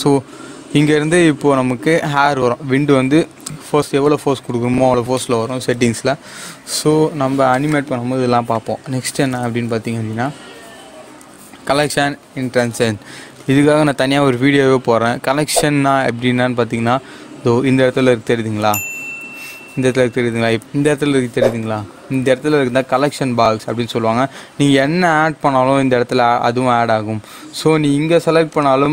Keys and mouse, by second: 0.9 click, 7.6-9.5 drag, 9.5 shift+a, 16.0 click, 28.4 click.